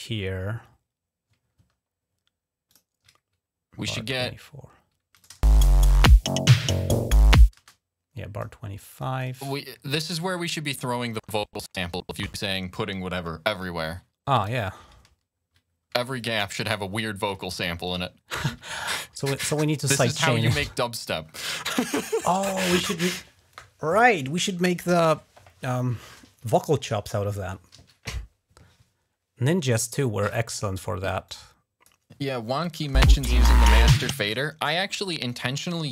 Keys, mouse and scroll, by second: 2.5 ctrl+click, 5.0 click, 5.2 space, 7.4 space, 7.5 click, 8.9 click, 9.1 click, 10.8-11.6 ctrl+scroll down 1, 12.1 scroll down 1, 14.2 click, 14.4 ctrl+scroll up 1, 16.0 click, 16.2-16.8 typing, 16.4 click, 16.8 alt+click, 17.2 click, 17.4 alt+1, 17.7 click, 18.0-18.3 ctrl+scroll down 1, 18.0 ctrl+click, 19.2 click, 19.8 ctrl+scroll up 1, 20.2 click, 20.5 click, 21.2-22.4 drag, 27.5 ctrl+s, 31.0 click, 32.4 click, 32.6 space, 32.8 click, 34.0 space, 34.5-34.9 ctrl+scroll down 2, 35.1 click.